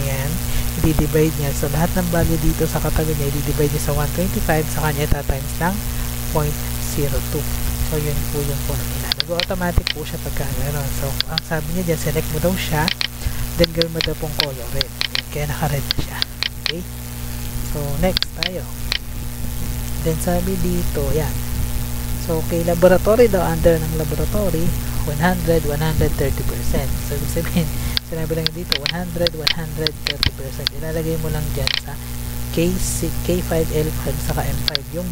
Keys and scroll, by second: 8.3 Return, 27.1 Tab.